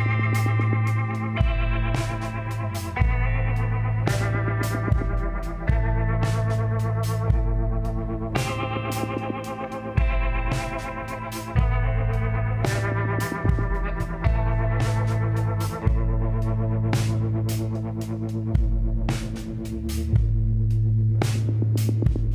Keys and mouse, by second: 1.0-2.7 middle drag, 4.7 Tab, 6.6 click, 8.1-10.8 drag, 10.8 Tab, 11.1 click, 12.4-13.9 drag, 14.1 l, 15.4 KP_1, 16.7 shift+d, 19.1 r.